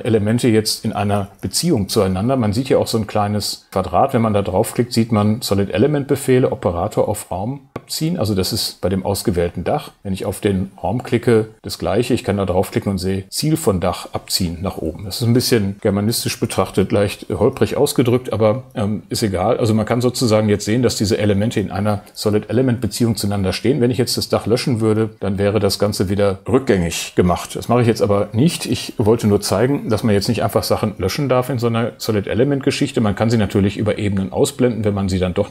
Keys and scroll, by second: 25.1 BackSpace, 27.3 super+z.